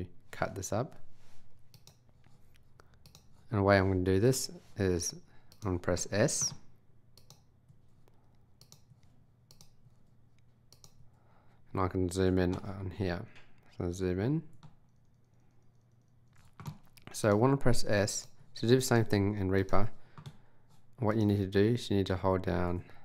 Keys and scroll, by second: 7.7 s, 8.9 s, 11.0 s, 17.6 s.